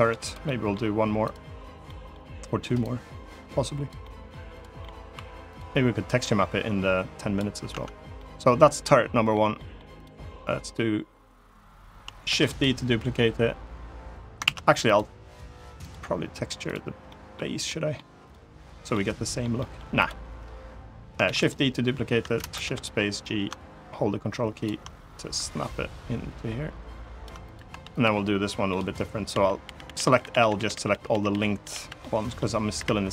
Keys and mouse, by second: 0.0 click, 0.2 middle click, 1.6 middle click, 2.6-3.6 drag, 3.7 middle click, 4.2 click, 4.5 middle click, 4.9 2, 5.9-7.1 drag, 7.4 Tab, 7.9-9.0 middle drag, 9.3 middle drag, 9.7 click, 12.0 shift+d, 12.2 right click, 14.2 ctrl+z, 14.6 click, 15.6-15.9 drag, 16.8 middle drag, 17.4-17.7 middle drag, 18.6-19.1 middle drag, 19.3 middle click, 19.7 drag, 21.0 shift+d, 21.1 click, 22.1 shift+space, 23.0-24.5 ctrl+drag, 24.9-27.0 ctrl+drag, 27.4 Tab, 27.7 click, 28.4 middle click, 29.0-31.5 typing, 31.7 middle click, 32.5 Delete.